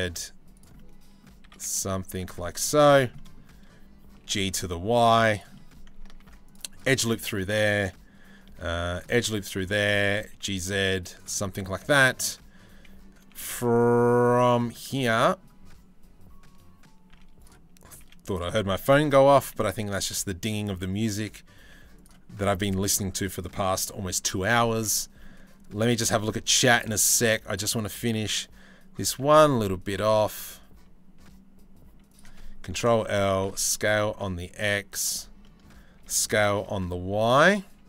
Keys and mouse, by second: 0.3 click, 1.1 s, 2.3 3, 2.5 click, 3.8 g, 5.2 click, 5.8 ctrl+r, 6.9-8.0 drag, 8.1 ctrl+r, 9.2 3, 9.4 click, 9.8 g, 11.0 click, 12.9-14.2 middle drag, 16.7 z, 17.6 z, 19.0 shift+d, 19.5 g, 20.3 s, 22.8 click, 23.4 g, 24.8 click, 25.5 g, 26.3 click, 26.7 2, 27.8 click, 28.8 g, 32.3 ctrl+l, 32.8 s, 35.0 click, 35.6 s.